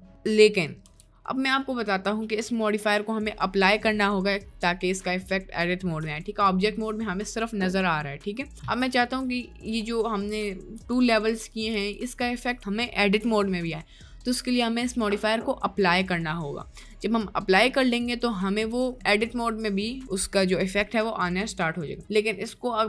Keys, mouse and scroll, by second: 0.9 Tab, 1.7 middle click, 6.5 middle click, 10.8 Tab, 11.1 Tab, 11.8 Tab, 18.3 middle click.